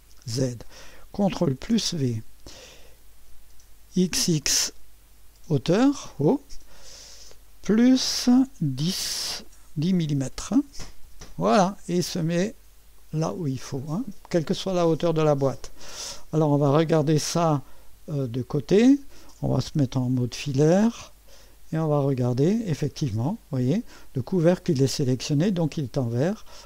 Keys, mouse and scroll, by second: 0.0 click, 1.6 ctrl+v, 4.0 typing, 6.2-8.3 drag, 8.3-9.0 typing, 10.1 typing, 11.0 Return, 13.0-14.6 drag, 17.9 1, 18.8 scroll up 1, 19.9 2, 20.5-21.4 scroll up 1, 21.0-22.5 right drag, 22.5-23.1 scroll up 1, 23.1 right click.